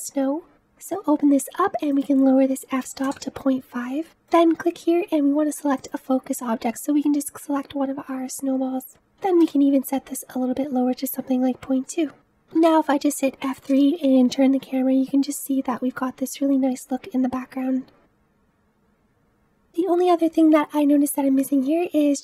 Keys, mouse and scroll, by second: 3.1-12.1 drag, 12.1 KP_0, 13.8 F3, 18.1-18.8 middle drag, 18.8-19.2 scroll down 3, 19.2-20.0 scroll up 2, 20.0 middle click, 20.7-21.4 scroll up 2, 21.4-22.2 middle drag.